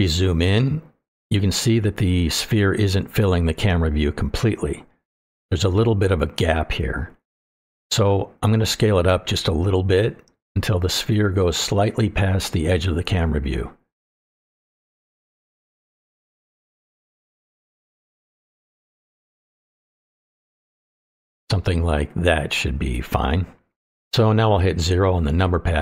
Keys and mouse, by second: 0.4-1.2 shift+middle drag, 2.3-2.6 shift+middle drag, 8.3-8.7 shift+middle drag, 9.1 click, 11.4 click, 11.6-14.5 drag, 15.7 shift+middle click, 18.4 shift+middle click, 19.3 click, 19.4-20.5 shift+drag, 21.3 shift+middle click, 21.9 shift+middle click, 22.9-23.3 shift+middle drag, 24.5-25.0 shift+middle drag, 25.6 KP_0.